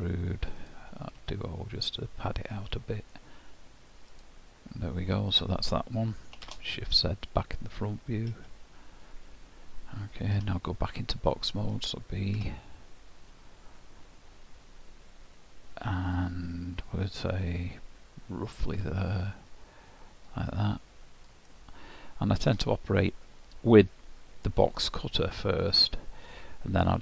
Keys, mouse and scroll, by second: 2.5 middle click, 6.5 shift+z, 8.3 KP_1, 10.4 d, 13.3-16.3 scroll up 1, 19.5 click, 21.5 middle click, 23.9 middle click, 24.9-25.5 scroll down 1, 25.5 scroll down 1.